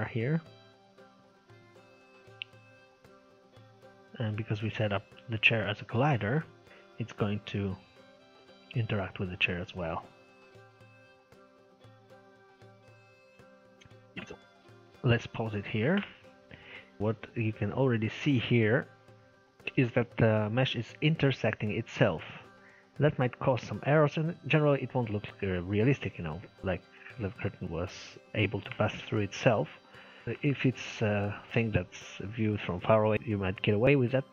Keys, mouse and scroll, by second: 1.3-5.3 middle drag, 14.3 click, 15.0-17.0 middle drag, 17.0 scroll up 3, 17.0-20.2 middle drag, 20.2-20.6 scroll down 1, 20.6 middle click, 21.2-22.5 scroll up 2, 22.5-24.1 middle drag, 24.1-24.6 scroll down 1, 24.6-26.6 middle drag, 26.6 scroll up 1, 26.9-33.1 middle drag, 33.4-34.0 scroll up 5, 34.0 middle click.